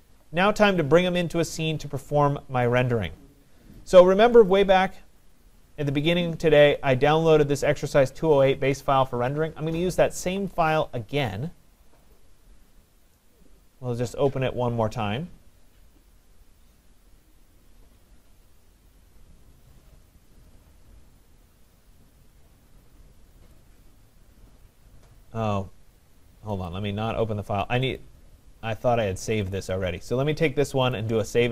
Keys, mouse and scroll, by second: 4.5-9.6 drag, 12.2-17.3 drag, 26.7-28.0 drag, 29.6 click, 31.0 click.